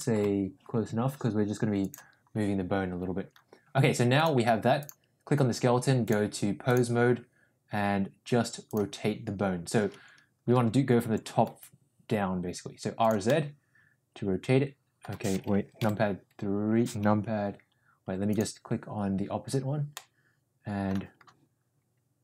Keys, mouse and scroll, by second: 0.2 g, 4.7 click, 6.1-6.7 drag, 8.7 click, 10.9 r, 13.2-15.1 middle drag, 15.7 KP_3, 19.8 scroll up 1, 20.0 middle click.